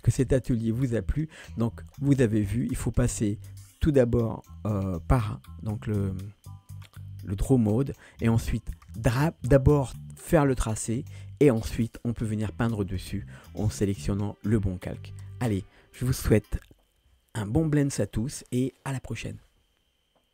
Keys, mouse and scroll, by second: 2.5 click, 3.5 click, 3.7 click, 4.1-5.5 drag, 5.9 click, 16.7 5.